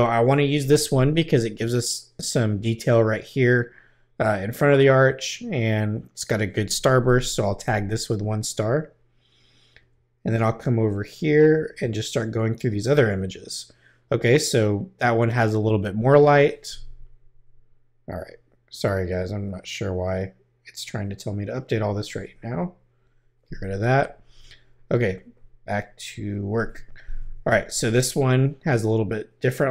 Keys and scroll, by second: 7.6 |, 9.7 Right, 11.5 Right.